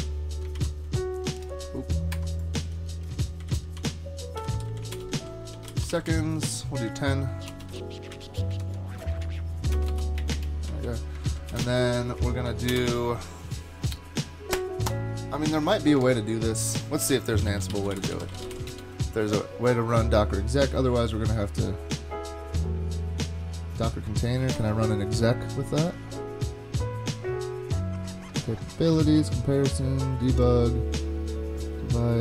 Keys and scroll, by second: 0.6 super+v, 2.1 ⟲, 3.4 shift+super+Left, 3.8 super+v, 4.5 Left, 4.7 Left, 4.9 alt+BackSpace, 5.4-8.2 typing, 8.6 shift+Tab, 9.1 Tab, 9.7 BackSpace, 9.9 BackSpace, 10.2 space, 10.3 space, 10.7 Down, 10.9 Down, 11.3 super+Right, 11.5 Return, 11.7 Return, 12.5 shift+super+Left, 12.7 BackSpace, 17.0 super+t, 17.2-19.0 typing, 24.6 ctrl+Tab.